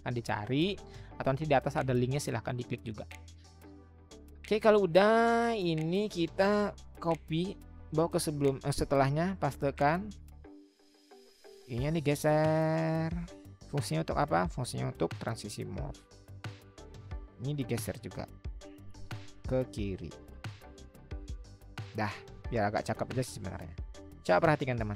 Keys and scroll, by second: 7.0 ctrl+c, 9.0 ctrl+v, 11.6-14.0 Right, 18.9-21.2 Left.